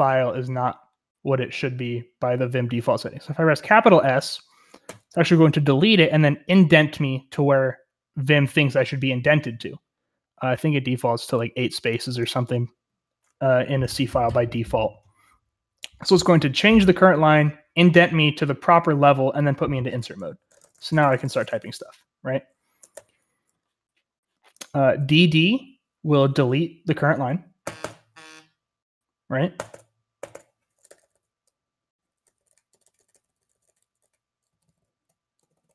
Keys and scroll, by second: 4.8 s, 20.5-21.7 typing, 22.8 Escape, 22.9 u, 27.6 typing, 29.3-35.7 typing.